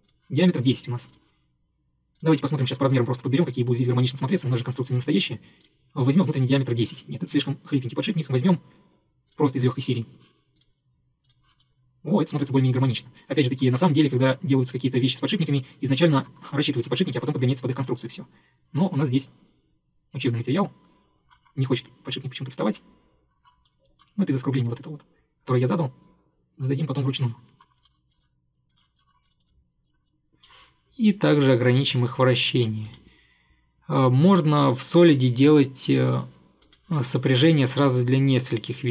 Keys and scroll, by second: 27.9 Delete.